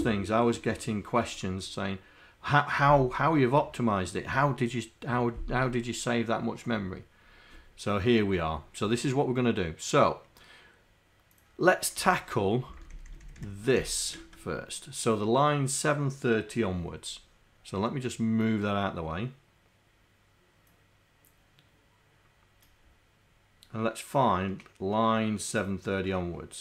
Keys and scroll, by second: 12.0 Home, 12.8 shift+Down, 13.4 shift+Down, 13.8 shift+Up.